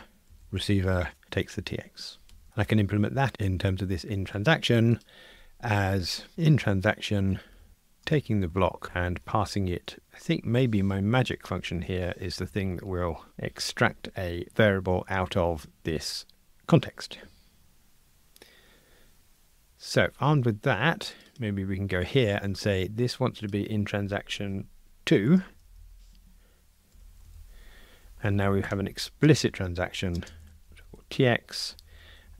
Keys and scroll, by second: 1.2 Escape, 8.8 Return, 12.5 Return, 26.2 Escape.